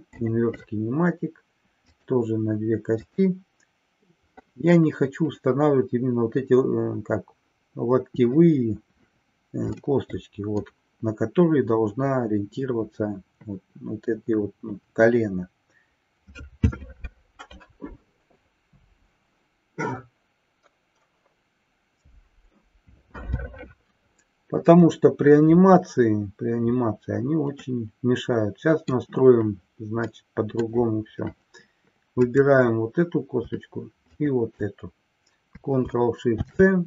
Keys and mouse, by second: 1.8 click, 3.2 click, 9.8-10.7 middle drag, 27.6-28.8 middle drag, 30.1 middle click, 32.2 click, 34.1 shift+click.